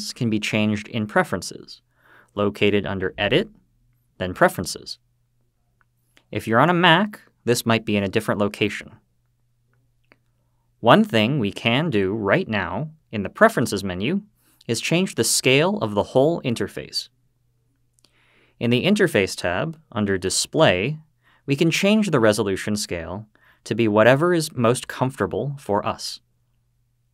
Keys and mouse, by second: 3.1-5.4 drag.